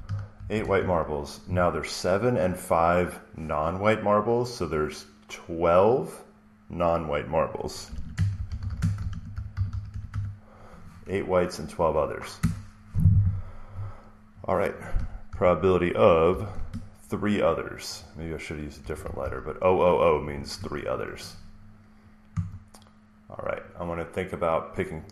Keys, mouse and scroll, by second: 0.0-0.8 typing, 7.5-10.5 typing, 12.3 Return, 13.0 Return, 15.2 p, 16.2 (, 18.7-20.1 typing, 22.3 Right.